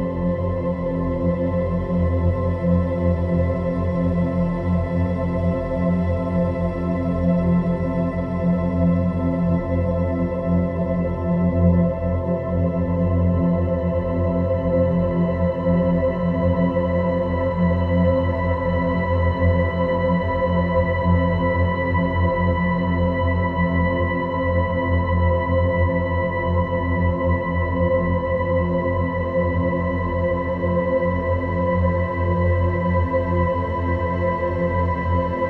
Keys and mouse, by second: 3.2-3.7 middle drag, 4.9-6.9 drag, 7.8 click, 9.7 Tab, 11.6 click, 13.3 click, 14.4-14.9 drag, 16.1 click, 17.1 g, 18.0 g, 20.2 r, 22.1 g, 23.5 g, 27.1 Tab, 27.6-28.7 middle drag, 29.9 click, 30.7 Tab, 32.8 g.